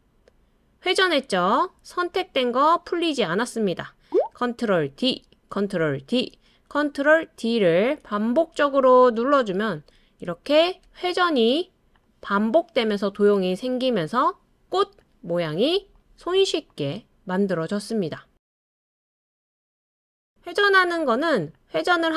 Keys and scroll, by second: 4.9 super+d, 6.1 super+d, 7.4 super+d, 8.6 super+d, 9.7 super+d, 10.8 super+d.